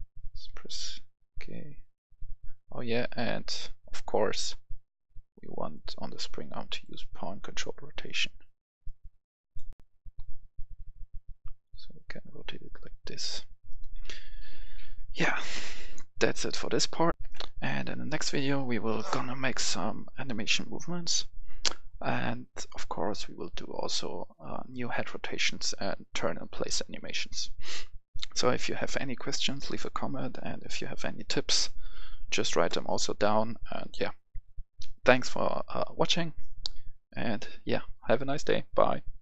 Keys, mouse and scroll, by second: 0.5 k, 3.1 Escape, 4.2 click, 10.1 k, 14.0-14.6 typing, 17.1 click, 17.2 F10.